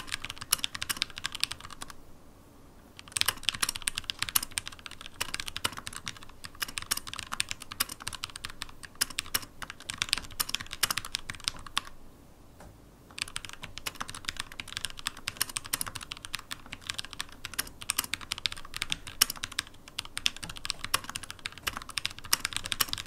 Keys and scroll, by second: 6.6 scroll up 1, 7.2 Down, 7.5 Up, 7.9 Down, 8.3 Up, 10.2 super+/, 11.4 super+/, 12.6 super+/, 15.7 shift+super+d, 17.5 super+e, 18.7 super+p, 20.4 super+p, 20.6 super+e, 22.8 shift+super+d.